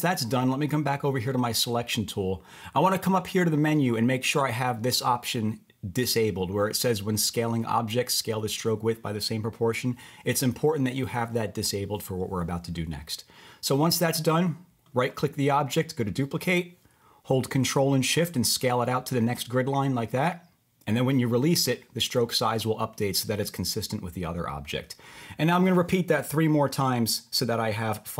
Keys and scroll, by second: 13.2 Return.